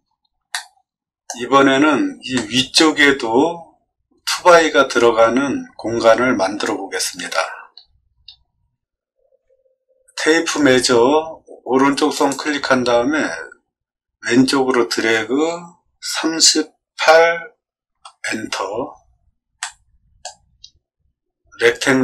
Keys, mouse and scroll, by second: 0.5 shift+middle click, 0.9 shift+middle click, 1.7 middle click, 1.7 scroll up 2, 1.7 middle click, 2.3 shift+middle click, 8.0 middle click, 8.0-8.5 scroll up 2, 8.4 middle click, 10.3 t, 12.1 click, 16.0 3, 16.9 8, 17.9 Return, 19.6 middle click.